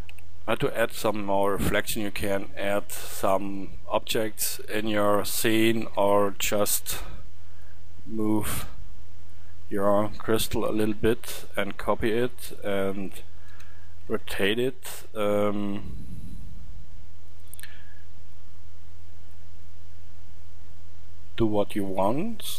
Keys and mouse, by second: 10.6 shift+d, 13.3 r, 17.2-19.8 middle drag, 20.4-22.5 middle drag.